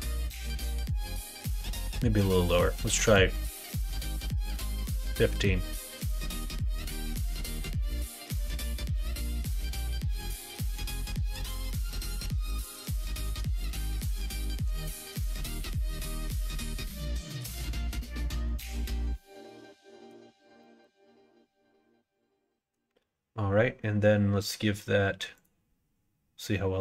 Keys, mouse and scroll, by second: 2.4-11.6 drag, 13.1-18.4 middle drag, 19.1 middle click, 20.5 middle click, 25.3-26.8 drag.